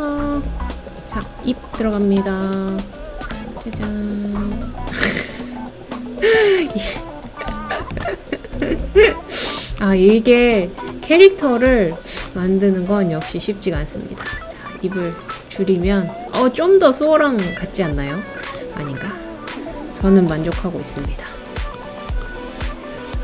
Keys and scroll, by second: 20.3 Page_Down.